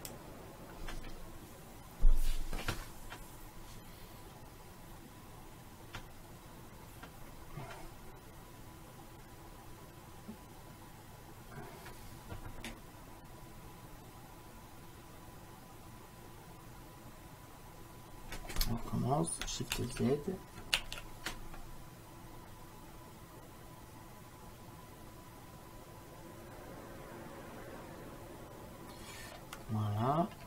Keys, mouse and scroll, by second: 20.1 shift+z, 23.0 shift+z, 29.4 middle click.